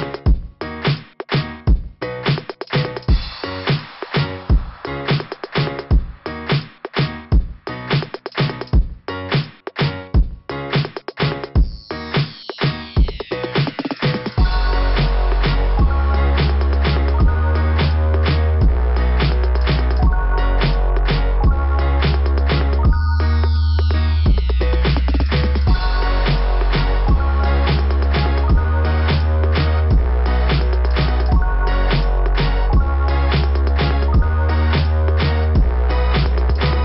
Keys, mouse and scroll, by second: 0.3 click, 0.4 click, 0.6 click, 0.7 click, 0.9 click, 1.7 click, 2.0 click, 7.5 click, 7.9 click, 8.3 click, 8.4 click, 8.6 click, 12.4 click, 12.9 click, 13.2 click, 13.6 click, 17.4 click, 18.0 click, 21.4 click, 21.6 click, 26.6 click, 26.9 click, 27.0 click, 27.2 click, 29.1 click, 29.3 click, 29.4 click, 29.5 click, 30.1 scroll up 2, 30.8 scroll down 2, 31.3 scroll up 2, 31.4 scroll down 2, 31.5 scroll up 2, 35.4-35.7 scroll down 2.